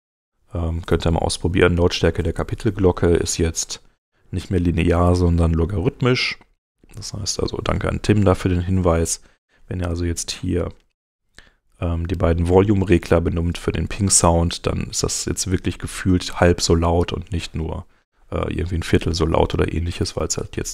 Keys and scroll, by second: 4.6 super+Tab, 8.4 shift+,, 20.4 super+Tab.